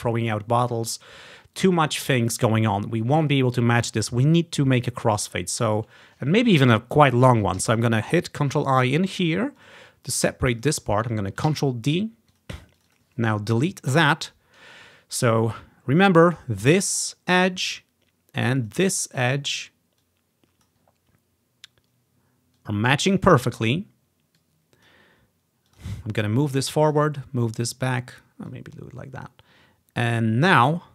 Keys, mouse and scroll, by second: 4.9 click, 5.7 click, 7.7 ctrl+i, 8.8-10.6 drag, 10.7 click, 10.8-13.5 drag, 11.6 ctrl+d, 13.6 Delete, 16.9 click, 17.7 click, 18.6 click, 19.2 click, 20.1 click, 20.8-22.1 drag, 22.6 click, 24.4-26.1 drag, 26.3 click, 27.3-30.9 drag.